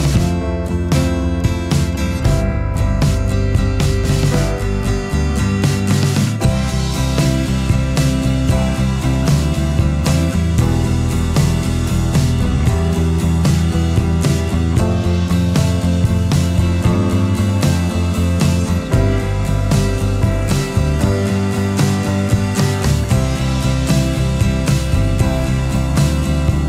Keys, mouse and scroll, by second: 0.0 space, 17.7 space, 19.2 alt+click, 21.6 shift+click.